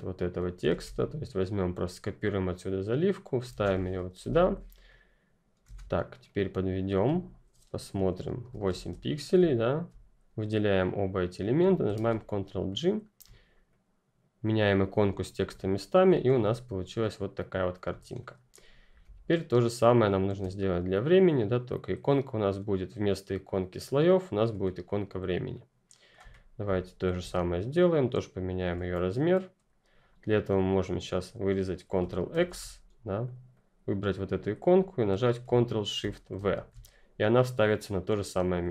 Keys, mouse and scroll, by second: 0.6 ctrl+c, 2.4 ctrl+c, 2.4 click, 3.4 ctrl+v, 4.1 Return, 4.4 click, 5.6 ctrl+z, 5.9 click, 9.4 shift+click, 11.5 ctrl+click, 11.9 ctrl+g, 12.6-12.9 ctrl+scroll up 1, 13.2 scroll up 1, 13.6 click, 15.4 ctrl+click, 15.5-16.0 ctrl+scroll down 1, 16.0-16.3 scroll down 1, 16.3 ctrl+click, 16.8-17.8 ctrl+scroll up 1, 17.8 scroll up 1, 18.1 click, 25.4 click, 26.2-27.1 ctrl+scroll up 2, 27.2 shift+click, 31.9 ctrl+click, 32.2 ctrl+x, 33.2 click, 35.3 click, 36.3 ctrl+shift+v.